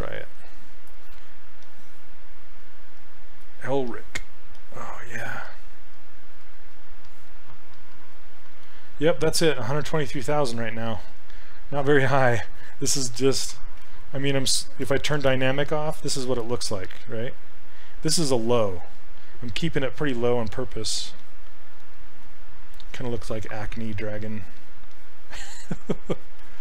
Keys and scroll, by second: 15.1 shift+d.